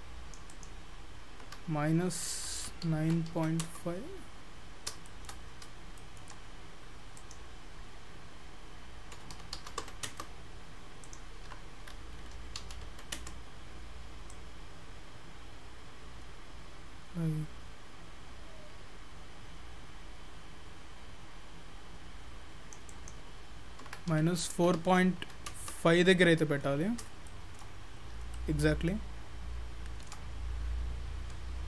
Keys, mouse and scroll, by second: 0.5 click, 4.8 scroll down 5, 5.1 shift+middle click, 5.5 scroll up 4, 6.0 shift+middle click, 7.2 click, 14.3 click, 22.9 click, 26.9-27.3 scroll down 3, 27.3 shift+middle click, 27.8-28.2 scroll up 6, 28.4 shift+middle click, 31.4 scroll up 1, 31.6 scroll down 2.